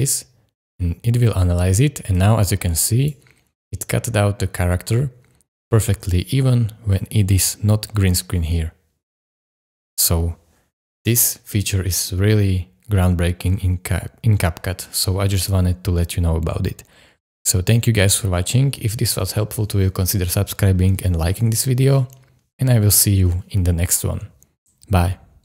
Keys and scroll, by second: 8.1 space, 9.5 space.